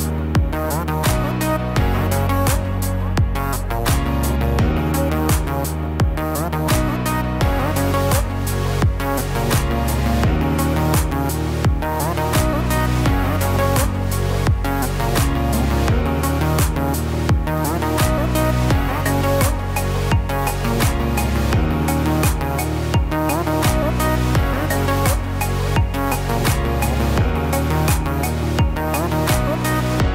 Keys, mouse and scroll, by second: 0.5 click, 1.5 click, 2.4 ctrl+b, 4.4 middle click, 7.2 ctrl+z, 7.5 ctrl+z, 8.4 ctrl+z, 10.0 ctrl+r, 13.5 middle click, 15.7 ctrl+r, 19.1 click, 20.5 ctrl+b, 23.0 scroll down 2, 23.4 middle click, 24.5 middle click, 25.7 click, 26.0 click, 27.1 ctrl+b.